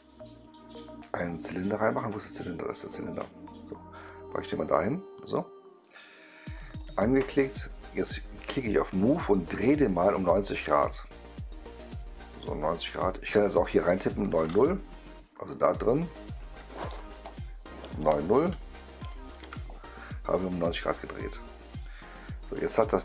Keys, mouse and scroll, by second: 2.8 click, 4.0 click, 4.6-5.7 right drag, 6.6 click, 8.4 click, 9.8-13.2 drag, 20.2-21.4 right drag, 21.7 right click, 22.7 click.